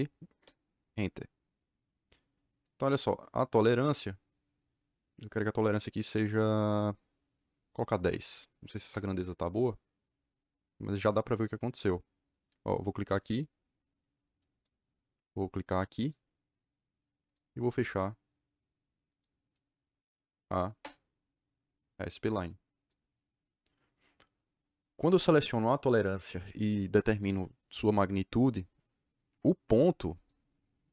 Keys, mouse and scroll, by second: 0.3 KP_Enter, 8.1 KP_1, 8.2 KP_0, 8.7 KP_Enter, 13.1 click, 15.9 click, 17.2 click, 19.0 click, 20.6 KP_Enter, 30.1 click.